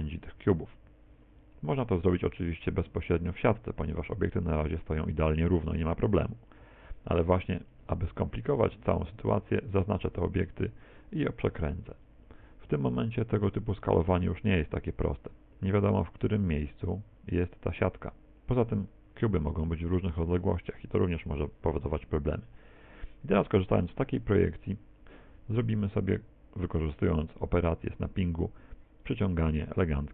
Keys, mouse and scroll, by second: 2.5 s, 7.9 shift+right click, 10.5 middle click, 11.6 r, 12.1 click, 13.6 right click, 14.2 s, 22.7 middle click, 25.3 n, 29.0 click.